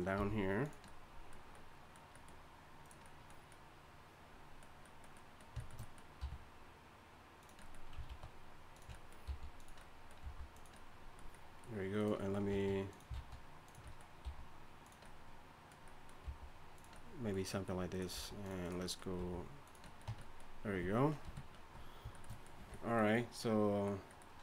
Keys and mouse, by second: 0.1 r, 2.8-4.4 drag, 6.2 r, 8.0 alt+s, 9.2 g, 10.2 g, 11.9 click, 12.5 s, 13.1 alt+s, 14.2 g, 16.2 g, 18.1 s, 19.2 g, 20.1 Tab, 21.2 KP_3, 22.6 a.